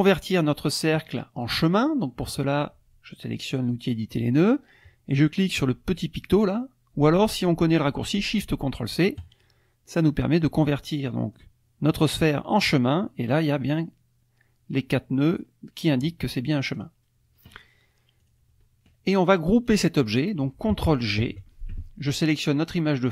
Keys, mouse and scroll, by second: 3.9 click, 9.2 click, 12.6 click, 16.7 click, 18.2 click, 19.7 click, 21.2 ctrl+g, 22.1 click.